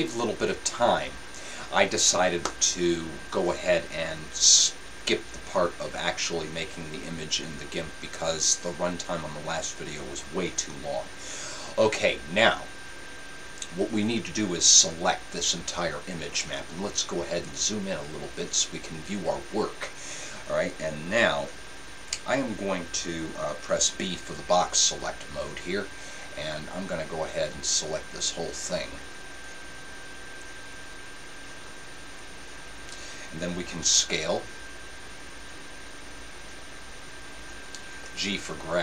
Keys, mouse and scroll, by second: 0.0-32.2 drag, 34.0 s.